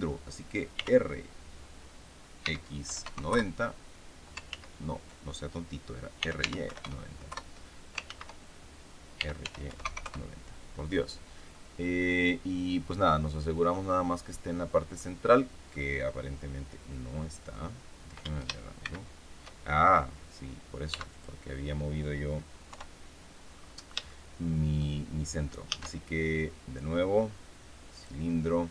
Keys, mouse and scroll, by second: 0.7 r, 2.3 x, 2.7 KP_9, 2.9 KP_0, 3.2 KP_Enter, 4.4 ctrl+z, 5.9-6.8 typing, 7.2 KP_Enter, 8.0 ctrl+z, 9.1 r, 9.3 y, 9.6 KP_9, 9.7 KP_0, 9.9 KP_Enter, 11.5-15.1 drag, 15.7-17.6 drag, 18.7 shift+c, 20.8 x, 21.0 click, 22.6 KP_3, 23.4-23.9 scroll up 2, 24.0 shift+click, 25.6 shift+a, 27.9 click.